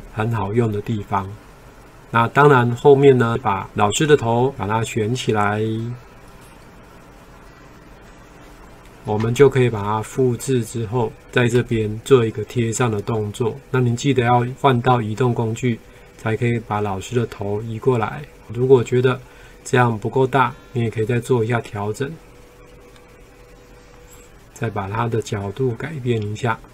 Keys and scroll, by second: 9.4 ctrl+c, 11.7 ctrl+v.